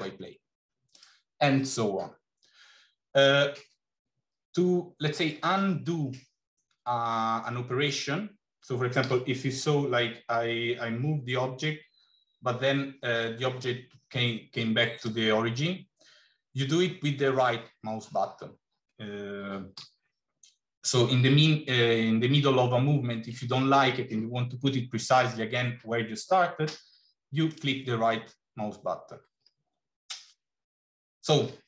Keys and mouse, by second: 8.9 g, 19.6 g.